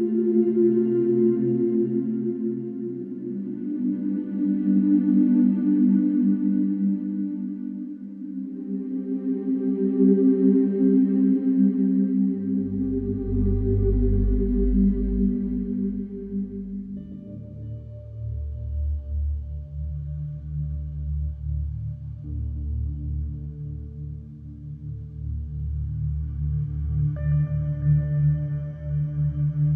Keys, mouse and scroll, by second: 1.5 middle click, 2.7 click, 3.4 right click, 5.1 click, 6.2 KP_9, 6.5 KP_0, 7.7 click, 9.0 click, 10.2 click, 13.2 click, 13.6 middle click, 16.9 click, 19.3 click, 23.5 click, 27.8 click, 29.1 right click.